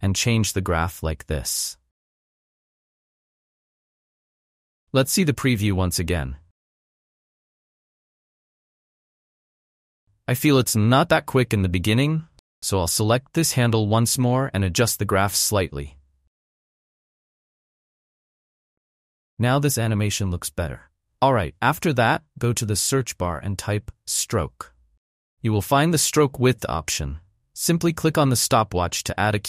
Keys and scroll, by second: 6.3 space, 8.0 space, 10.1 space, 15.6 space, 20.2 space, 23.5 s, 24.1 r, 24.5 o.